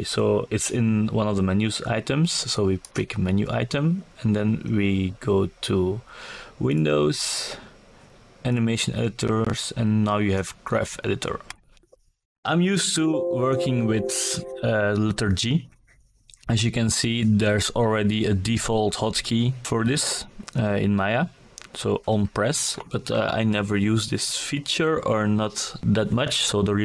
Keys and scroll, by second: 8.1 g.